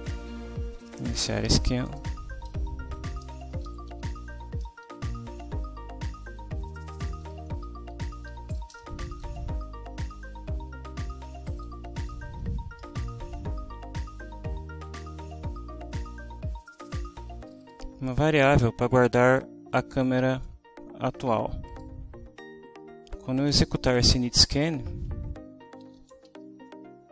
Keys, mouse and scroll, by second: 0.0-0.6 typing, 1.9 Return, 2.6 Up, 3.3-5.2 typing, 6.9-9.7 typing, 10.8 Down, 11.9 Home, 12.1 Right, 12.8 Delete, 14.6 Down, 17.4 click, 21.7 click, 25.6-27.1 typing.